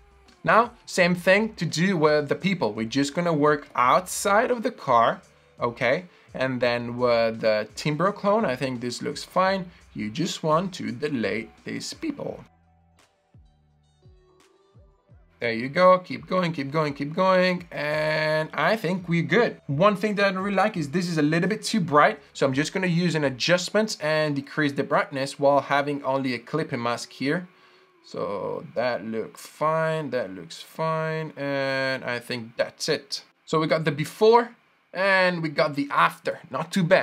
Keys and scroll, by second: 3.9 i, 12.4 alt+z, 18.8 super+d.